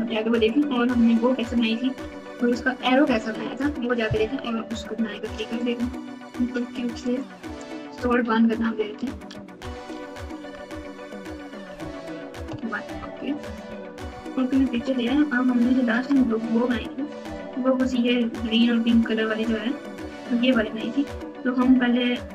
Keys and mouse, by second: 6.2 click, 6.5 click, 7.1-12.5 drag, 14.1 KP_Multiply, 14.7 KP_Add, 15.7 KP_Add, 15.9 KP_Add.